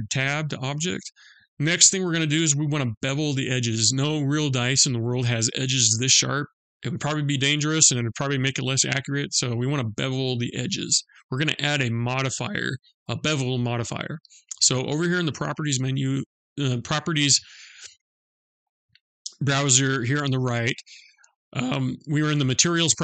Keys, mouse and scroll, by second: 0.9 click.